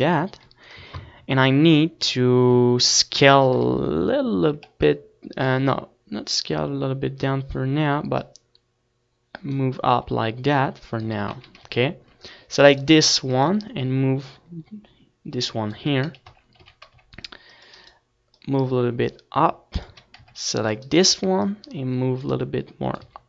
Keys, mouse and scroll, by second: 0.3 z, 0.6 KP_1, 9.5-11.3 drag, 11.4 middle click, 12.3 a, 12.6 z, 12.8 c, 14.1-15.9 right drag, 14.5-16.3 drag, 16.9 a, 17.4 z, 17.7 z, 18.0 c, 18.8-20.5 right drag, 19.4-20.5 drag, 20.8 click, 20.8 a, 21.2 c, 21.9-23.2 right drag, 22.4-23.2 drag.